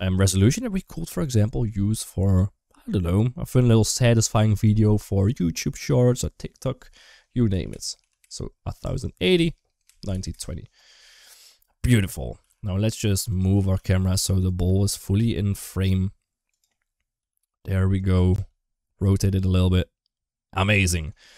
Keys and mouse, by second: 12.2 g, 13.3 r, 14.5 space, 15.0 g, 17.0 g, 17.9 r, 20.9 shift+middle click.